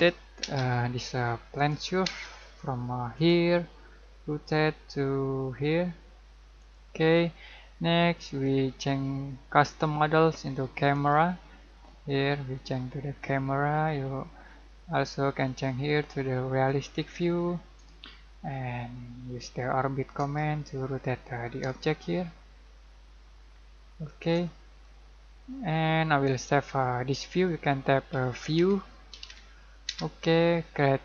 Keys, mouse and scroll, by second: 0.0-0.5 typing, 1.6 click, 2.1 space, 3.2 click, 3.7 scroll down 1, 6.6 click, 11.0 click, 12.1-12.4 scroll down 1, 12.4 middle click, 13.5-13.9 scroll down 1, 13.9-15.5 middle drag, 15.5 click, 17.5-17.9 scroll down 1, 18.1-27.4 shift+middle drag, 28.2-29.9 typing.